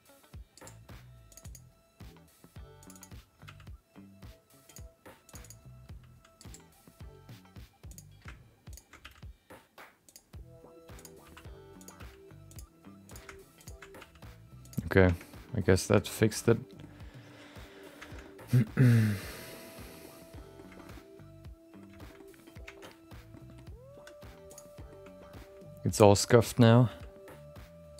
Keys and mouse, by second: 1.3 click, 2.8 click, 2.9 click, 3.4 g, 5.2 click, 5.4 click, 5.8 g, 7.9 click, 8.7 ctrl+shift+click, 9.0 g, 10.9 click, 11.2 r, 11.9 g, 13.0 click, 14.0 g, 15.3 Tab, 15.5 middle click, 16.2 middle click, 16.8-17.8 middle drag, 18.0 shift+middle click, 18.2 middle click, 18.6-20.0 middle drag, 20.3 middle click, 20.7 shift+middle click, 20.9 middle click, 22.0 shift+middle click, 22.1 middle click, 22.6 Tab, 23.3 middle click, 23.9 3, 24.5 click, 24.7 middle click, 25.3 shift+middle click, 25.9 click, 26.2 shift+middle click, 26.4 middle click, 26.8 g.